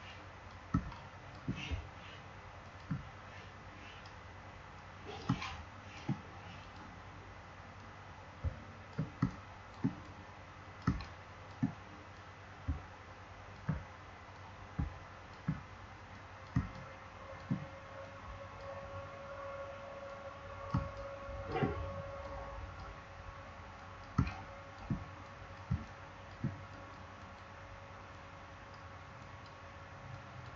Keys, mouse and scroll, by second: 0.7 space, 0.8 click, 1.1 space, 2.5-5.2 alt+drag, 5.2 space, 5.3 click, 5.7 space, 6.5-9.1 drag, 9.1 space, 9.4 click, 9.5 space, 9.9 click, 10.7 space, 10.9 click, 11.2 space, 12.0-14.3 drag, 14.3-16.1 drag, 16.1 click, 16.5 space, 16.7 click, 17.9-20.7 drag, 20.7 space, 20.9 click, 21.1 space, 22.1-23.7 drag, 24.1 space, 24.2 click, 24.5 space, 25.1 click, 25.6 space, 25.8 click, 26.0 space, 26.6-30.5 drag, 30.5 space.